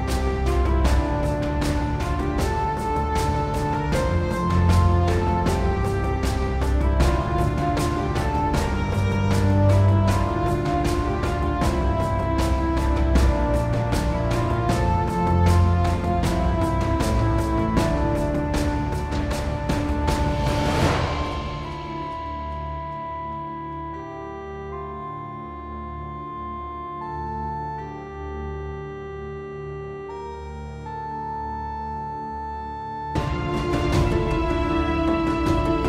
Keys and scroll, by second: 8.8 super+z, 10.9 q, 15.6 super+z, 17.3 super+z, 28.6 super+z, 29.1 super+z, 35.7-35.8 typing.